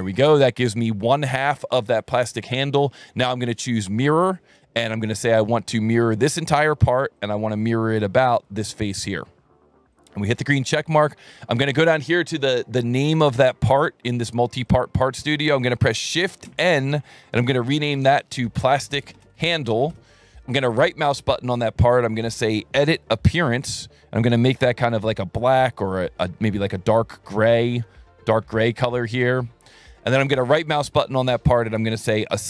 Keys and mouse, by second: 3.9 click, 6.2 click, 7.2 click, 8.4 click, 10.0 click, 13.7 click, 14.7 click, 16.5 shift+n, 18.0-20.2 typing, 20.7 right click, 23.4 click, 25.4 click, 26.9 click, 27.4 click, 28.6 click, 29.8 click, 30.9 right click.